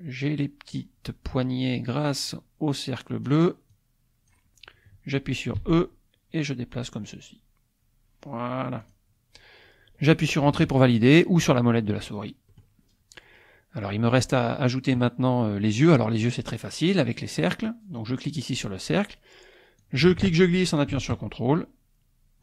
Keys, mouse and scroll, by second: 2.7-4.5 drag, 5.6 e, 8.8 click, 12.5 middle click, 17.5 click, 19.9-22.4 drag.